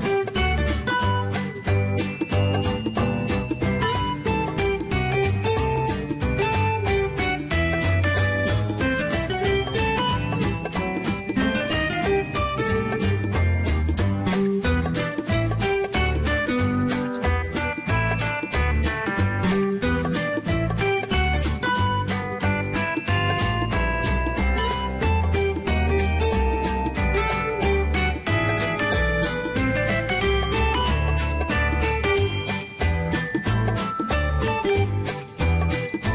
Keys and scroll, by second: 3.8 1, 4.1 Return, 17.2-18.1 typing, 19.2 5, 19.5 Return, 23.2 0, 23.7 5, 24.1 Return, 27.5 0, 28.0 ., 28.3 5, 28.4 Return, 31.7-33.0 typing, 33.0 Return.